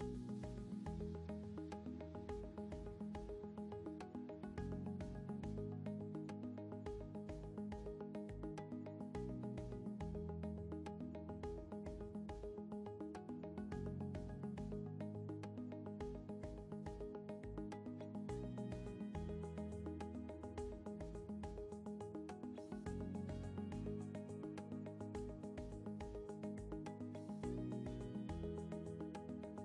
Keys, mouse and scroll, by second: 4.7 ctrl+g, 16.2 ctrl+g, 27.8 ctrl+g.